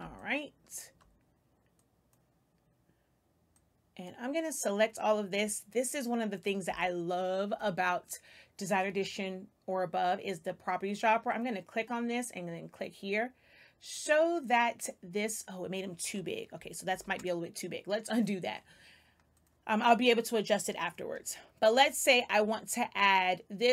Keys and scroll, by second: 6.6 space, 16.8 ctrl+z.